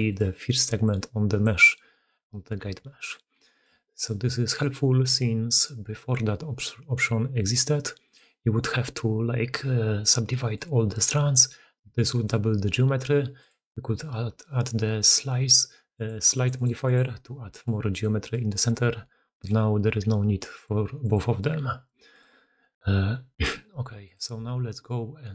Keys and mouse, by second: 0.5-2.4 typing, 0.7 click, 1.5-1.9 drag, 2.8 alt+h, 3.2 alt+a, 3.7 click, 7.9 click, 11.9 click, 15.8 click, 16.2 click, 17.3-18.7 d, 17.5 click, 18.1 click, 18.8 click, 19.3 d, 19.3 d, 20.4 click, 20.9 click, 22.0 middle click, 23.9 click, 24.3 alt+a.